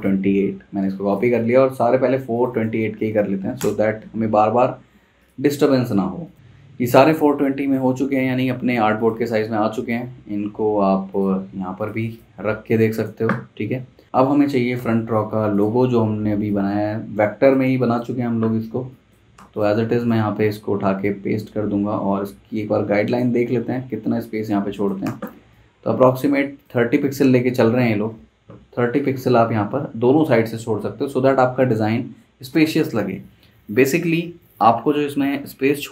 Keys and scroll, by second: 0.6 super+c, 0.8 super+c, 3.1 super+v, 3.6 Return, 12.3 z, 12.4 z, 14.8 v, 18.7 z, 19.4 v, 24.6 z, 25.1 v.